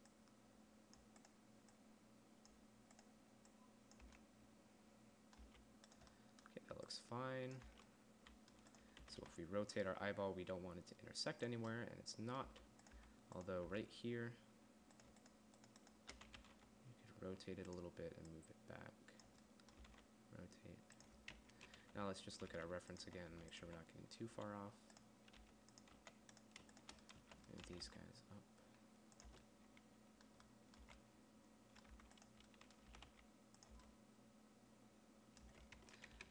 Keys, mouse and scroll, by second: 4.5 Tab, 5.9 Tab, 8.1 Tab, 9.4 r, 11.9 click, 12.9 Tab, 13.4 Tab, 14.1 Tab, 16.8 r, 20.3 r, 21.9-23.8 typing, 24.8 z, 25.9 g, 26.4 z, 27.6 z, 28.1 g, 29.7 Tab, 31.3 a, 32.4 Tab, 33.3 g, 34.1 Tab, 35.9 Tab, 36.2-36.3 typing.